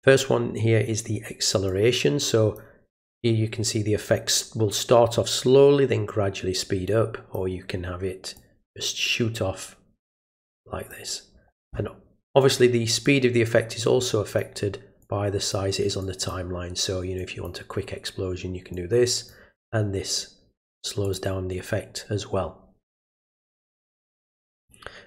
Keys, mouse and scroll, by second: 1.7 click, 6.9 click, 8.4 click, 10.4 click, 13.0-14.4 drag, 15.0 click, 16.0 click, 17.2 click, 18.7 click, 21.0 click, 24.6 click.